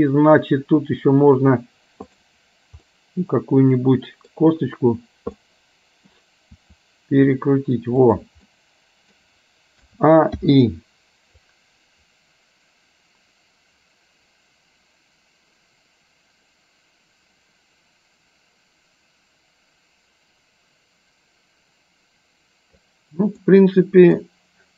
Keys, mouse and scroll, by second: 2.3 click, 3.0-4.4 middle drag, 5.5 middle click, 6.7 r, 8.7 middle click, 9.9 a, 10.5 i, 11.5-24.3 drag, 24.3 middle click.